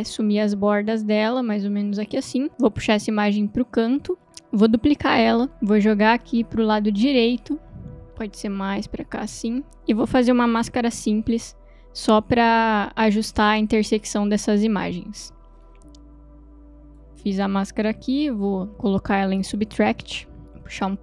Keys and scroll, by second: 5.1 ctrl+d, 18.7 m.